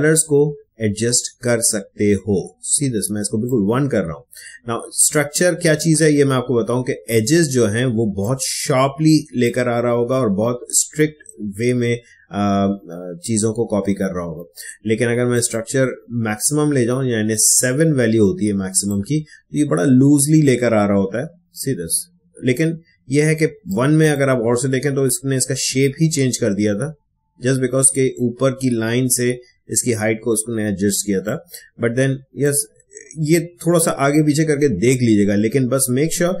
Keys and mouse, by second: 1.6-7.9 drag, 7.9 space, 8.2-11.8 ctrl+drag, 15.3-23.5 drag, 23.6-31.1 drag, 31.2-36.4 drag.